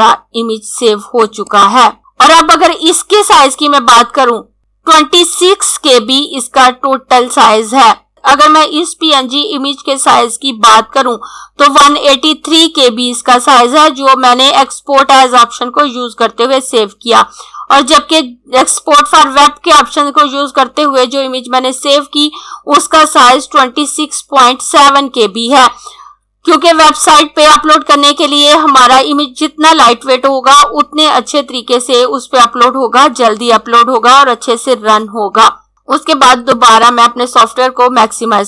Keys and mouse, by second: 1.1 click, 36.5 click.